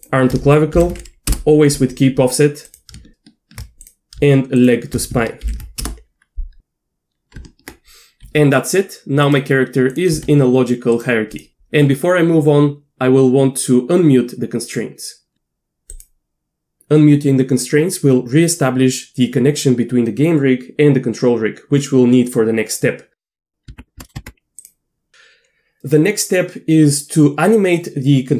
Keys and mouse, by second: 0.7 ctrl+p, 3.8-4.2 drag, 4.6 shift+click, 5.5 ctrl+p, 7.4 Tab, 8.3 r, 9.9 drag, 10.1 r, 11.3 click, 11.5 Tab, 24.0 middle click, 24.1 Tab, 24.6-25.1 drag.